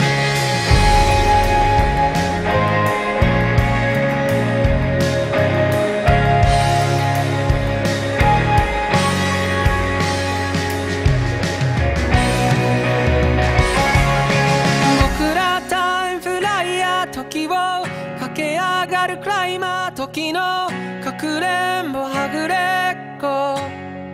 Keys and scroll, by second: 1.6 ctrl+z, 2.8 ctrl+z, 3.9 ctrl+z, 5.1 ctrl+z, 7.1 ctrl+z, 7.5 ctrl+z, 9.0 ctrl+z, 13.7 ctrl+z, 16.8 ctrl+z, 19.9 ctrl+z, 23.6 ctrl+z.